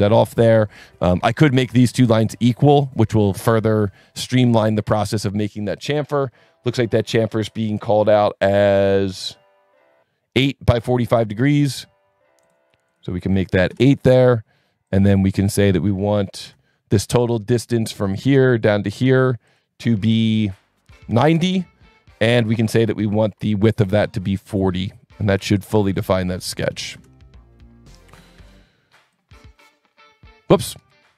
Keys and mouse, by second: 0.2 Escape, 1.0 click, 1.8 ctrl+click, 4.1 click, 4.5 click, 4.6 s, 5.5-5.8 drag, 11.6-12.0 drag, 12.4-12.8 drag, 13.5 KP_8, 13.7 KP_Enter, 14.9 click, 16.4 Escape, 17.5 click, 18.6 click, 19.5 click, 21.1 KP_9, 21.2 KP_0, 21.4 KP_Enter, 24.7 click, 25.6 click, 26.0 click, 26.5 KP_4, 26.6 KP_0, 26.9 KP_Enter, 28.1 Escape, 29.1 click, 30.8 s.